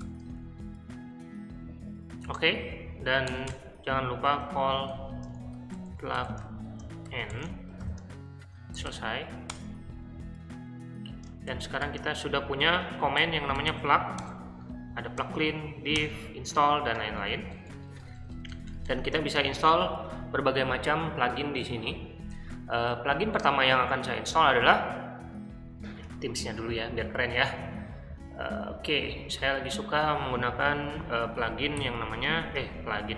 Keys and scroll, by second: 0.0-0.5 typing, 3.2 Return, 3.4-9.3 typing, 9.4 Return, 11.2-13.6 typing, 14.1 Tab, 15.1 Tab, 15.9 Tab, 16.9-19.4 typing, 31.7 i.